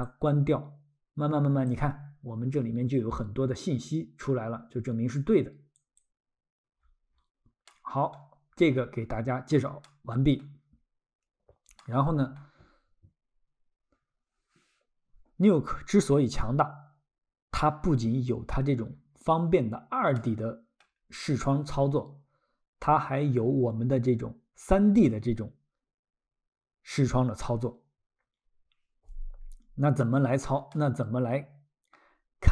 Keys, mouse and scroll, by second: 0.0 click, 2.0-2.5 scroll, 4.4 scroll, 5.8 click, 6.8-7.6 scroll, 7.7 middle click, 9.8 middle click, 10.7-11.6 scroll, 11.8 middle click, 18.4 scroll, 20.2 middle click, 30.7 middle click.